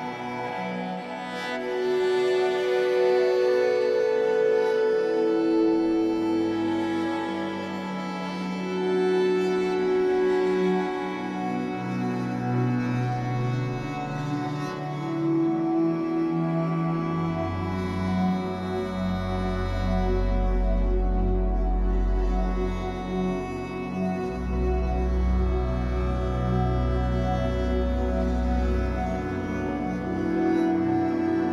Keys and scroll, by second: 0.2 l, 1.1 shift+w, 1.9 Escape, 3.2 shift+w, 5.7 2, 6.1 Return, 7.6 Escape, 10.2 shift+w, 11.0 Escape, 14.2 shift+w, 14.9 Escape, 19.0 3, 21.1 Escape, 25.6 F8.